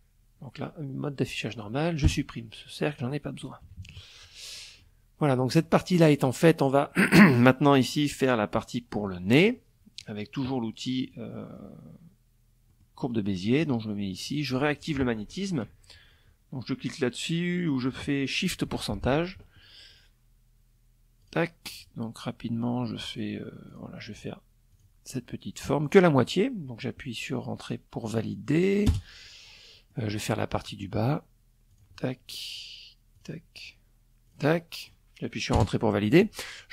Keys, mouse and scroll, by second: 0.6 Delete, 1.4 click, 2.2 KP_Subtract, 3.1 click, 4.1 click, 4.5 click, 5.3 click, 7.4 click, 9.6 click, 9.9 click, 11.2 click, 11.6 click, 17.5 shift+click, 19.7 click, 22.2 click, 23.2 click, 24.4 click, 27.4 Return, 28.1 click, 28.8 click, 30.2 click, 31.7 click, 32.8 click, 33.3 click, 34.1 Return.